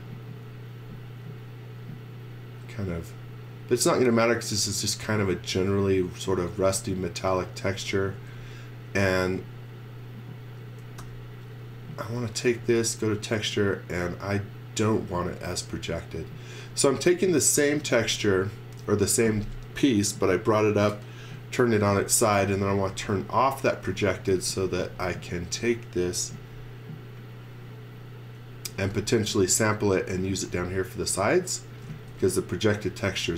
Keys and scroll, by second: 8.1 space, 9.2 space, 11.0 u, 17.6-18.7 typing, 22.5-25.2 typing, 26.3 m, 28.5-29.4 typing, 31.5-33.3 typing.